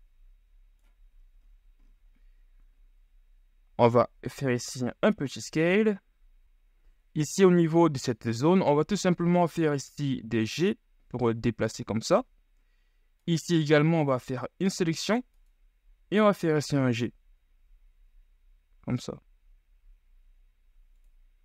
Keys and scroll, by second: 3.9 s, 8.7 g, 16.0 g.